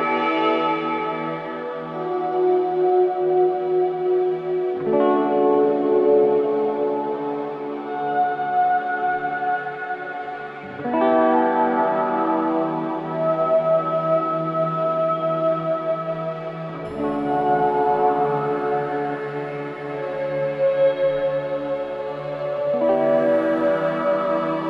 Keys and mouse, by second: 1.1-3.9 drag, 4.4 click, 6.0 click, 7.2-7.9 typing, 8.1 Return, 9.6-11.4 drag, 10.9-11.9 typing, 12.2 Return, 14.2-14.9 typing, 14.4 click, 17.0 click, 18.3 click, 19.8-21.5 drag, 21.9-23.8 drag, 23.5 typing.